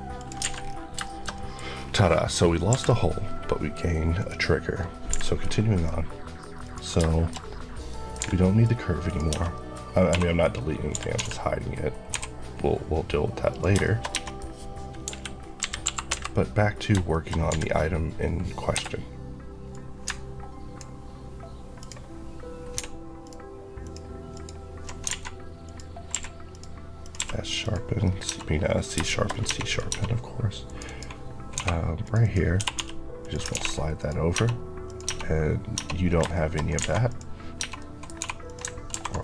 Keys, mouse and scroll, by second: 0.1 click, 0.3 alt+a, 0.5-0.9 scroll down 2, 0.9 shift+middle click, 1.6 scroll down 1, 2.6 KP_5, 4.0 click, 5.0 h, 5.1 middle click, 5.6 click, 7.0 shift+middle click, 8.1 h, 8.3 middle click, 8.5 scroll up 1, 8.9 click, 9.2 Tab, 9.4-10.0 scroll up 2, 9.4 middle click, 10.0 3, 10.3 click, 10.8 g, 11.0 x, 13.4 click, 13.7 shift+middle click, 14.0 Tab, 14.1 middle click, 14.2 scroll down 1, 14.9 KP_1, 16.0 KP_Decimal, 16.8 shift+KP_Decimal, 17.0 shift+middle click, 17.2 scroll up 1, 17.4 d, 18.6 Escape, 19.6 click, 20.0 ctrl+click, 21.7 ctrl+click, 22.7 ctrl+x, 23.1 ctrl+click, 25.0 ctrl+alt+a, 25.5 click, 26.0 q, 26.4 click, 27.1 q, 27.5 click, 27.9 scroll up 1, 28.1 Tab, 28.9 shift+middle click, 29.2 scroll up 1, 29.4 Tab, 29.5 click, 29.8 Tab, 30.5 click, 30.7 Left, 31.4 2, 31.9 click, 32.1 Left, 32.4 typing, 33.1 click, 33.4 ctrl+x, 33.9 click, 34.2 Tab, 34.7 click, 35.0 Tab, 36.0 scroll down 2, 36.2 shift+middle click, 36.5 scroll up 2, 36.7 alt+a, 37.0 click, 37.5 Tab, 37.7 middle click, 38.1 2, 38.4 click, 38.8 ctrl+b.